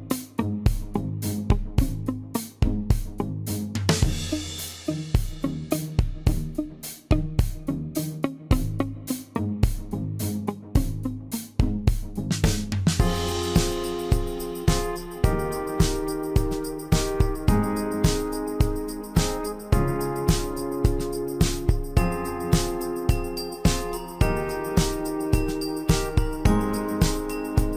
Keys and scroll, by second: 3.7 l, 7.3 l.